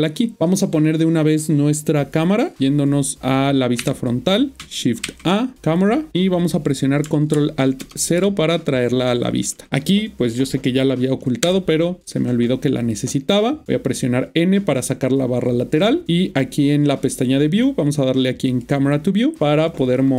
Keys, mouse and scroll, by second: 3.8 1, 5.0 typing, 5.7 click, 7.8 ctrl+alt+KP_0, 11.5 n, 12.8 click, 18.5 click, 19.4 n, 19.7 click.